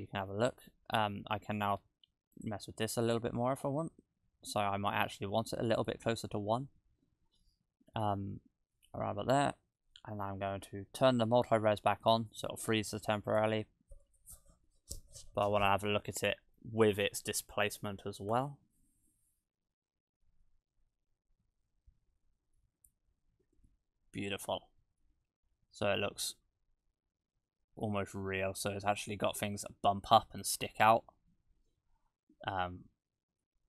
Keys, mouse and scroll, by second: 0.9-1.5 scroll up 5, 2.4 click, 2.9 click, 3.0 click, 5.8 click, 18.1 click, 23.4 shift+`.